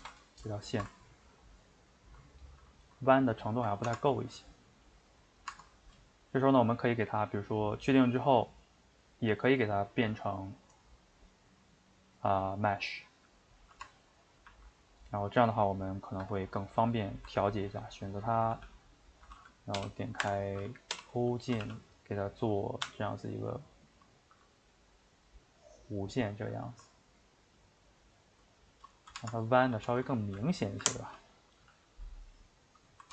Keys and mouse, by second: 0.0 ctrl+space, 0.6-3.2 ctrl+shift+middle drag, 3.2 click, 3.4-3.9 shift+middle drag, 3.9 Tab, 4.5-5.6 middle drag, 5.6 Tab, 6.0-12.9 shift+middle drag, 13.8 Tab, 14.3 a, 14.5 a, 15.1 middle click, 16.1 shift+right click, 16.4-17.6 ctrl+middle drag, 17.6 ctrl+right click, 17.9 middle click, 18.5 g, 26.9-29.3 ctrl+middle drag, 29.3 Tab, 29.7 a, 30.2 g, 31.2 click, 31.6 g.